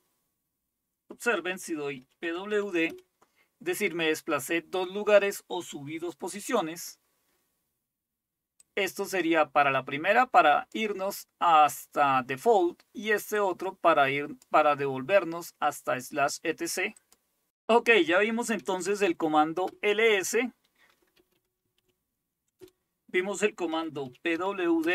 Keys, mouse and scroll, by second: 1.7-3.3 typing, 8.6-10.9 drag, 13.4-14.5 drag, 17.0 click, 18.7-19.5 typing, 19.7 Return, 20.9-22.3 typing, 22.6 Return, 23.4-24.9 typing.